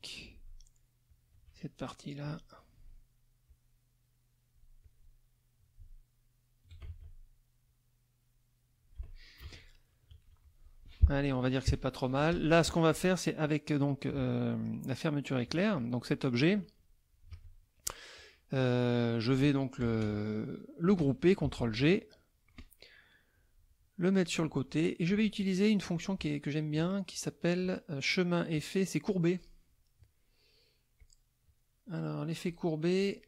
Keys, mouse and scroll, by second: 1.0 shift+click, 2.2 click, 3.4-4.7 drag, 4.8 click, 5.5-6.9 alt+drag, 6.9 ctrl+alt+z, 7.0 ctrl+alt+click, 7.6-9.0 ctrl+alt+drag, 9.4 ctrl+KP_5, 10.1 KP_Subtract, 10.7 middle click, 11.3 middle click, 11.9 middle click, 12.2 F1, 12.3 click, 13.4 click, 14.1 click, 14.6 click, 15.5 shift+click, 16.1-17.3 shift+drag, 17.3 ctrl+z, 19.8 KP_Subtract, 20.0 KP_Add, 20.6 ctrl+middle click, 20.6-20.9 scroll down 3, 21.4 ctrl+g, 24.2-25.2 drag, 25.9 click, 28.5 click, 30.9 click, 32.4 click.